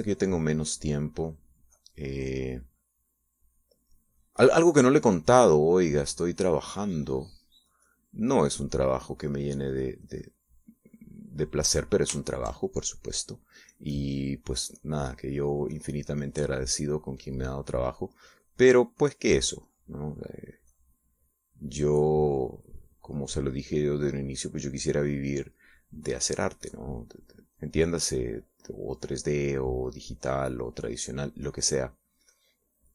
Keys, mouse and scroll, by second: 12.6 middle click, 13.4-14.7 shift+middle drag, 14.9-30.7 drag, 30.8-32.9 drag.